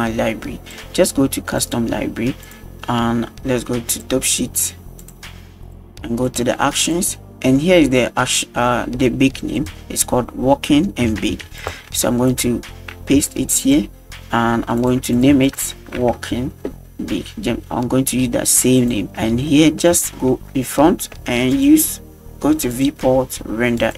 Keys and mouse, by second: 1.6 click, 2.5 click, 3.9-4.4 drag, 5.0-5.8 drag, 6.3-7.0 drag, 9.6-11.7 drag, 12.3-13.8 ctrl+drag, 14.8 click, 15.1 click, 15.5-18.8 ctrl+drag, 19.5-19.8 middle drag, 20.0 shift+middle click, 21.5-22.0 drag, 22.7-23.9 drag.